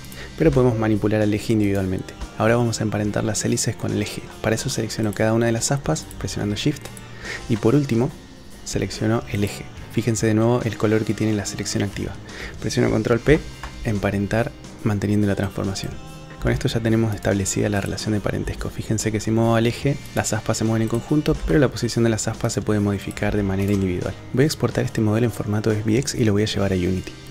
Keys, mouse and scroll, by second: 0.0 g, 0.5 g, 2.2 shift+click, 5.0 click, 6.0 shift+click, 6.9 shift+click, 9.3 shift+click, 13.3 ctrl+p, 16.3 f, 16.3 g, 16.5 g, 17.7 click, 18.4 g, 20.9 click, 21.3 g, 21.4 g, 23.3 g, 24.3-27.3 drag.